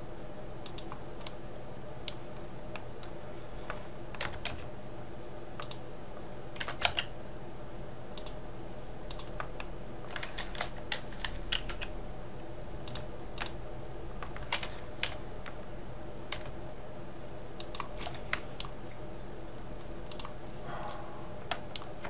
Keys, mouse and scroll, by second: 1.4-4.3 middle drag, 4.3 r, 6.7 g, 9.2 click, 10.7 l, 11.3 r, 13.4 click, 15.1 l, 16.4 g, 18.1 middle click, 18.9-20.2 scroll down 1, 20.2 click, 21.0-22.0 middle drag.